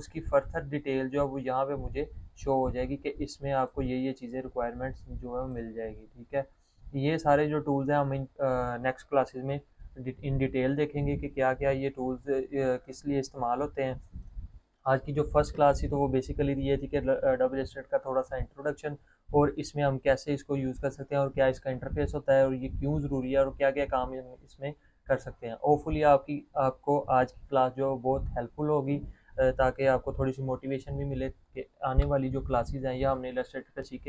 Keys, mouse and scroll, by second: 4.6 click, 13.8 click.